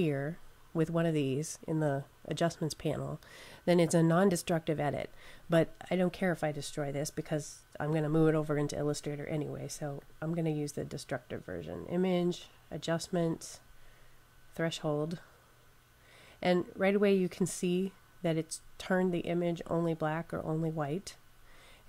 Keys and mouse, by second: 9.8 click, 14.5 click, 17.1 click, 19.8 click.